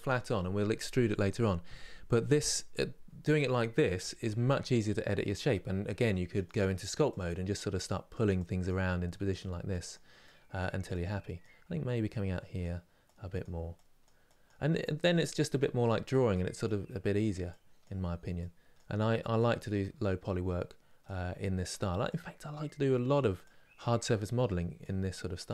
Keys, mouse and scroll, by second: 6.8-25.5 drag.